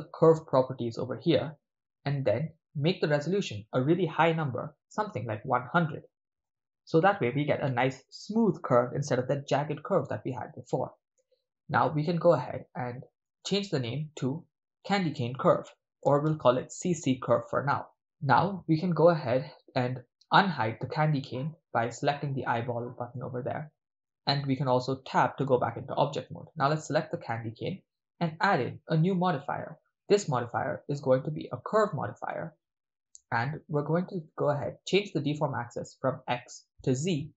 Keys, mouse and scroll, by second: 0.8-8.0 drag, 4.9 0, 5.0 0, 13.3-17.3 drag, 21.7-23.3 drag, 23.3-24.1 middle drag, 24.5-25.1 ctrl+middle drag, 25.4 Tab, 26.7 right click, 27.3 middle click, 28.6 click, 30.1-32.7 drag, 33.6 click, 35.5-37.3 drag.